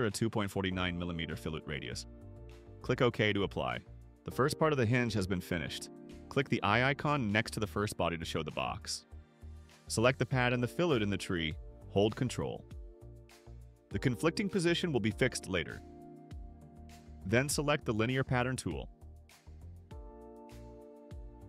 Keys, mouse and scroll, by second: 0.0-0.4 typing, 3.0 click, 4.4 right click, 5.1 middle click, 5.4-5.9 drag, 7.2 click, 7.8 click, 10.1 click, 11.7 ctrl+click, 21.2 click.